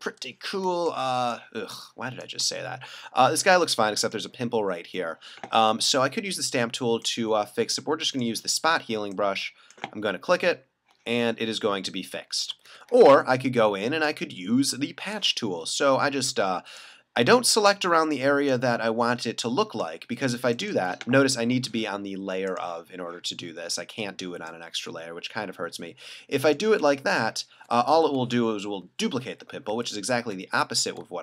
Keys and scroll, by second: 0.6 space, 3.5 space, 12.7 super+z, 28.6 super+d, 29.3 alt+super+z.